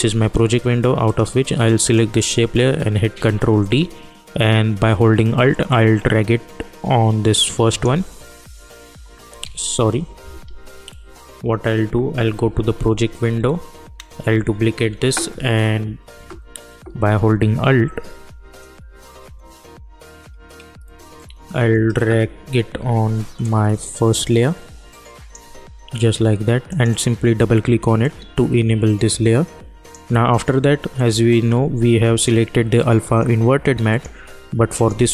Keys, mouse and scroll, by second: 1.0 click, 3.1 ctrl+d, 5.6-9.4 alt+drag, 9.4 ctrl+z, 23.5-30.9 alt+drag, 32.1 ctrl+click.